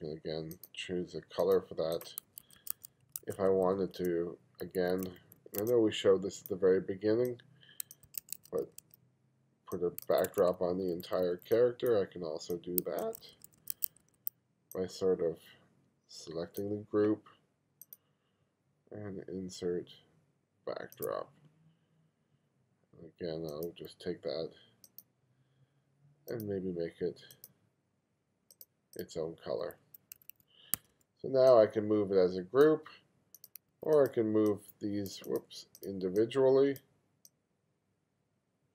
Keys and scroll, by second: 2.3 1, 4.8 2, 8.1 1, 10.2 2, 13.1 1, 29.7 2, 30.2 2, 30.8 1, 33.7 2.